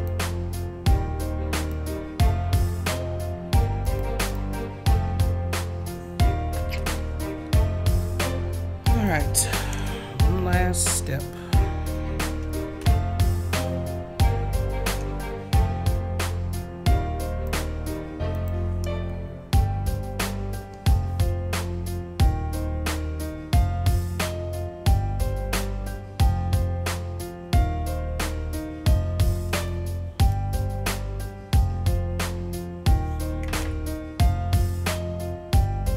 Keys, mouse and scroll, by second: 1.5 click, 3.8 click, 4.1 click, 7.7-8.8 scroll down 2, 8.9 click, 10.4 middle click, 17.4 click, 18.3 click, 22.5-29.4 drag, 31.5-32.9 drag, 33.6 ctrl+z, 34.4-35.9 drag.